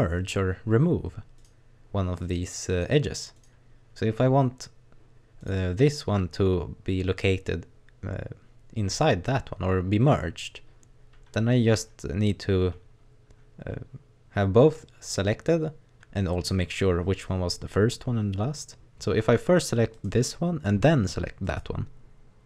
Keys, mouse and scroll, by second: 1.4 right click, 2.2 right click, 2.9 right click, 3.4 right click, 5.4 right click, 8.9 right click, 19.9 right click, 21.5 shift+right click.